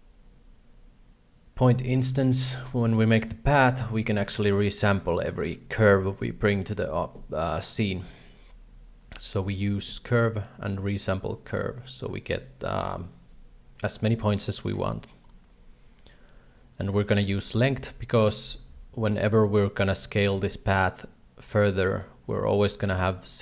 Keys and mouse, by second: 2.1 alt+a, 2.4 shift+middle click, 2.7 b, 3.4 g, 4.2 shift+a, 4.7 g, 17.1 click, 17.8 shift+middle click.